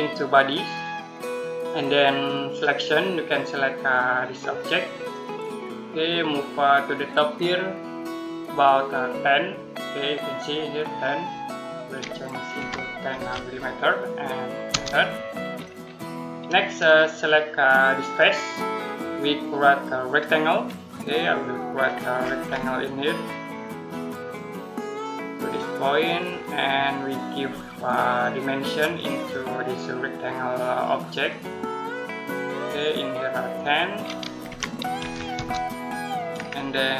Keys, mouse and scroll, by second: 5.0 click, 12.4-13.0 typing, 14.5 Return, 15.4 middle click, 18.0 click, 21.0 middle click, 21.6-23.2 scroll down 1, 24.1 click, 28.7 click, 34.3-34.8 typing, 35.2 Return, 36.2-36.9 scroll down 1.